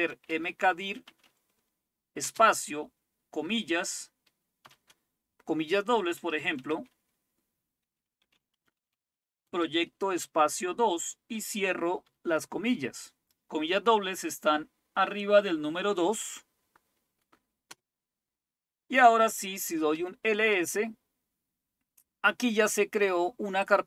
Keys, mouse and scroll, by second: 0.0-2.2 typing, 4.7 typing, 6.1-10.2 typing, 12.1 typing, 17.7 Return, 19.5-20.4 typing, 23.7-23.8 drag.